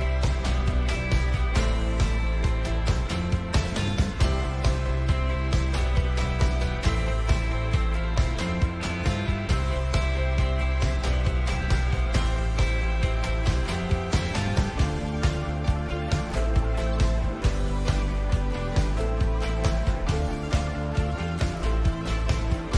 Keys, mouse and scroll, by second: 2.7-17.1 middle drag, 3.9-11.4 drag, 12.9-19.1 drag, 19.1-22.3 middle drag, 22.3-22.7 drag.